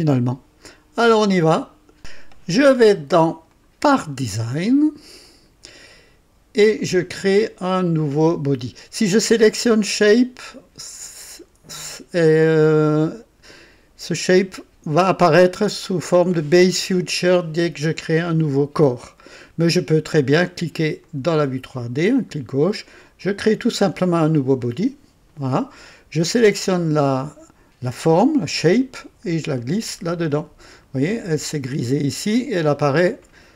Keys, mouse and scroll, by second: 2.0 click, 3.4 click, 5.2 click, 6.7 click, 9.4 click, 21.0 click, 23.2 click, 26.3 click, 28.9-30.5 drag.